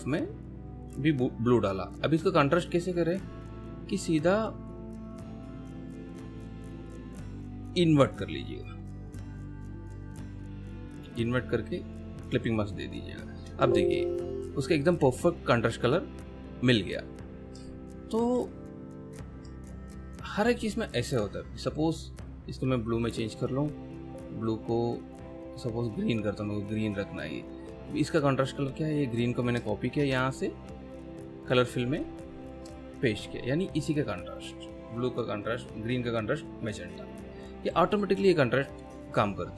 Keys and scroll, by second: 13.4 space, 17.6 ctrl+alt+space, 19.7 ctrl+alt+space, 30.0 ctrl+c, 33.0 ctrl+v.